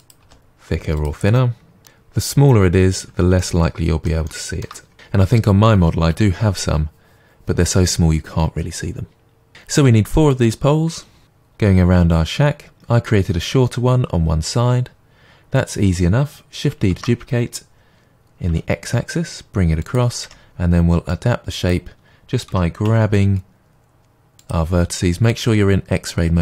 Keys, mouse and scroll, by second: 0.0 click, 0.2 g, 1.0 click, 1.4 middle click, 2.0 g, 2.3 click, 2.4 Tab, 2.6 scroll down 1, 2.8-3.2 middle drag, 3.2 click, 3.7-4.1 scroll down 2, 4.1-15.6 middle drag, 15.6 click, 16.9 shift+d, 20.2 Tab, 21.1-24.5 drag, 22.5 g.